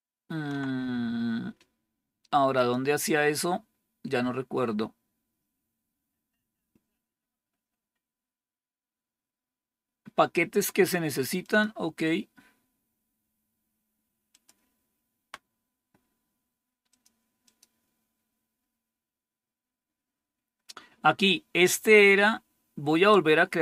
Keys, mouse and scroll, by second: 2.5 click, 4.6-5.8 scroll down 1, 5.8-7.4 scroll down 1, 11.3 click, 14.2 click, 16.8 click, 17.4 click, 23.4 scroll down 2.